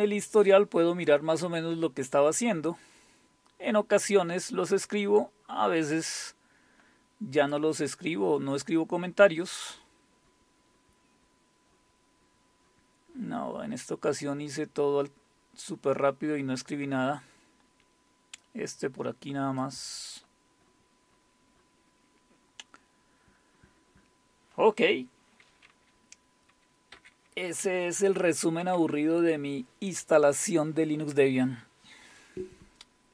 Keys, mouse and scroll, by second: 1.4-5.4 scroll up 4, 6.1-8.2 drag, 9.1-13.7 scroll up 12, 14.2 scroll up 2, 15.3 scroll up 2, 16.2 scroll up 2, 18.4-19.6 drag, 20.6-22.4 scroll up 2, 23.2-24.8 scroll down 1, 26.9 super+4, 28.6 super+3.